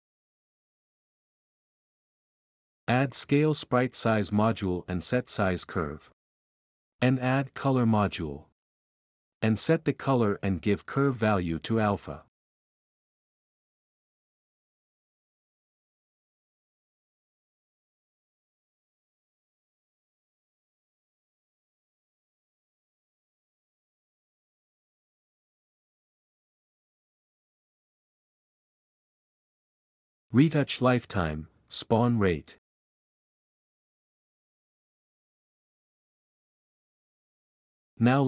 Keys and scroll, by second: 0.0-3.3 typing, 4.7-6.3 typing, 5.8 Down, 6.2 Return, 12.1-13.8 typing, 15.1-15.8 typing, 17.7-18.5 typing, 23.0-23.9 typing, 27.0 typing.